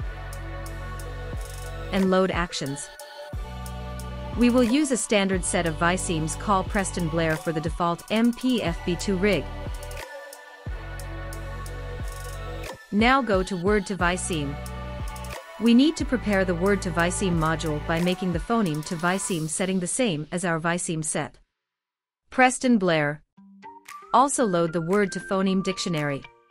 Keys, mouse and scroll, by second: 2.4-4.7 drag, 6.7-10.0 drag, 12.4 click, 15.0-18.1 drag, 20.6-22.5 drag, 24.3 click.